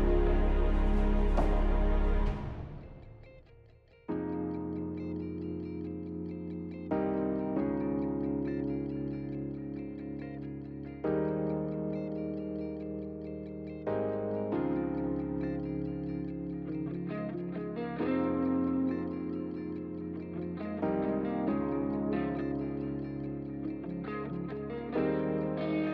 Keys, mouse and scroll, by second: 1.2 double click, 1.2 5, 2.1 F4, 9.8 double click, 10.2 double click, 10.5 double click, 10.9 double click, 11.3 double click, 11.7 double click, 12.1 double click, 12.5 double click, 13.0 double click, 13.3 double click, 14.1 double click, 14.4 double click, 14.8 double click, 15.2 double click, 15.5 double click.